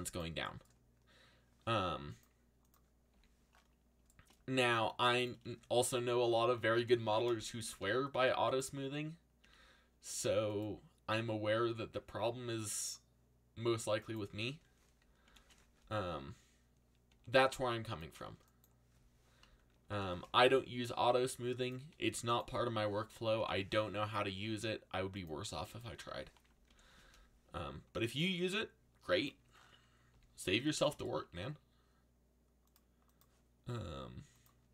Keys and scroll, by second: 3.1 z, 6.7 ctrl+l, 7.8 r, 9.4 a, 15.2 ctrl+l, 17.1 r, 19.9 ctrl+l, 20.9 r, 23.3 ctrl+l, 24.3 r, 26.7 ctrl+l, 27.8 r, 30.1 z, 31.2 a.